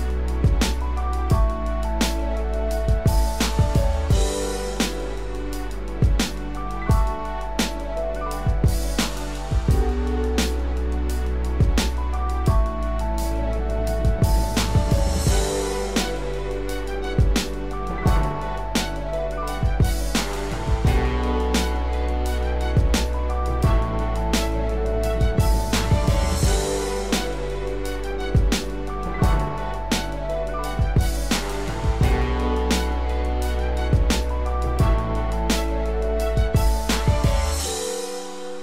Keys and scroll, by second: 13.9 ctrl+z, 15.3 ctrl+alt+z, 24.6 ctrl+-.